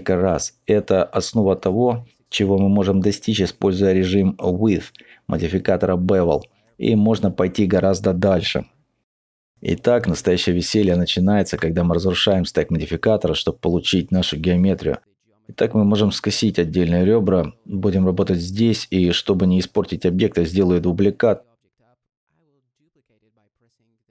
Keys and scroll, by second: 1.0 Tab, 1.4 n, 2.0 Tab, 2.4 3, 3.3 e, 3.9 g, 3.9 x, 4.3 Tab, 10.7 ;, 16.0 ctrl+z, 16.0 Tab, 22.5 z.